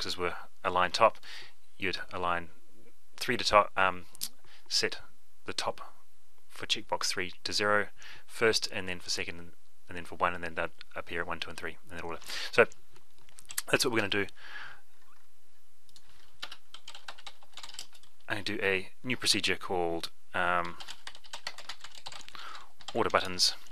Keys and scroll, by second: 13.9 F12, 23.3 ctrl+shift+c.